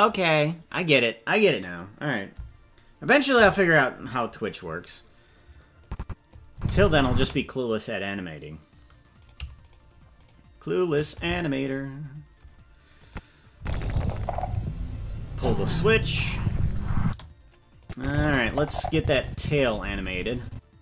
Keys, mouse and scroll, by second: 5.8 click, 6.5 space, 7.1 space, 9.7-11.6 shift+right drag, 13.0 click, 13.5 space, 17.0 space, 17.8-20.8 drag.